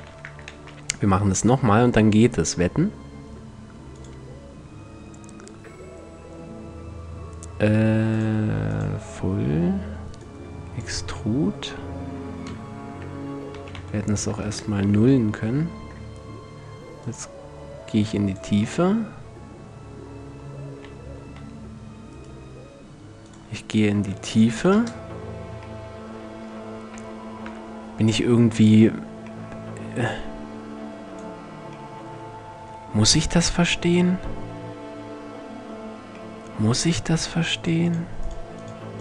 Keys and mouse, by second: 0.1 shift+a, 7.7-11.7 middle drag, 12.5 KP_Decimal, 13.2 s, 16.6-18.5 middle drag, 20.2 s, 22.8-24.6 drag, 27.0 KP_5, 37.2-39.0 middle drag.